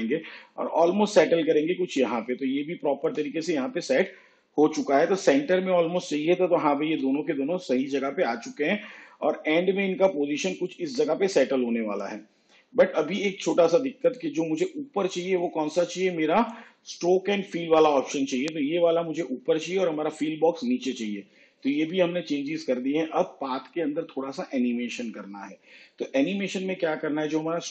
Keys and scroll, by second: 6.9 shift+/.